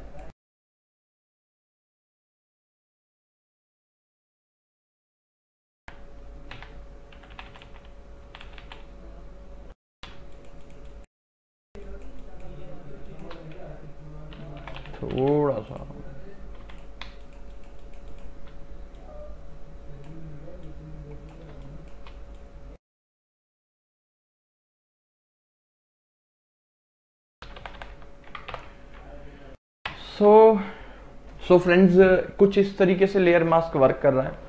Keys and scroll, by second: 2.9 x, 5.9 x, 7.3 [, 10.2 space, 14.7 [, 16.7 x, 17.1 space, 21.6 space, 24.2 space, 24.8 x, 27.1 space, 27.7 ctrl+KP_Subtract, 28.6 ctrl+KP_Subtract, 30.0 ctrl+KP_Add.